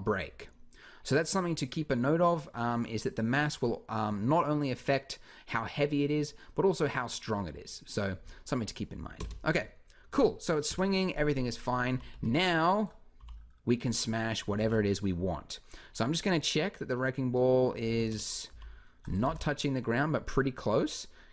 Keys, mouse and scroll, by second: 9.0 Escape, 10.4-12.9 typing, 14.4 alt+a, 17.8 Escape, 18.3 g, 19.1 alt+a.